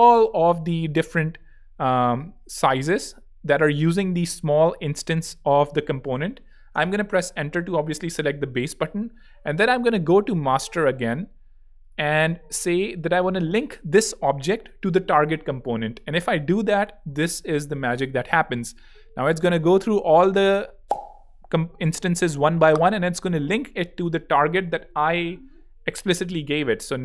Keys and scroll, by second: 0.2 alt+l, 6.7 Return.